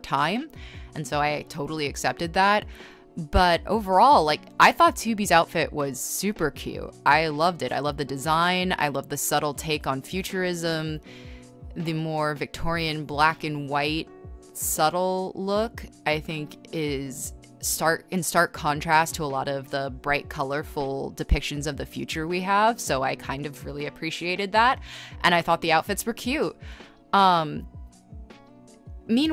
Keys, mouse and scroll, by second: 2.3 ctrl+z, 4.6 space, 5.3 e, 6.0 z, 7.4 z, 7.8 space, 10.5-11.4 typing, 13.4 g, 15.2-16.1 typing, 17.9 e, 18.1 b, 20.1-21.1 typing, 23.3 e, 24.1 b, 25.1 e, 25.6 b, 27.5 ctrl+z, 28.9 scroll, 28.9 ctrl+z.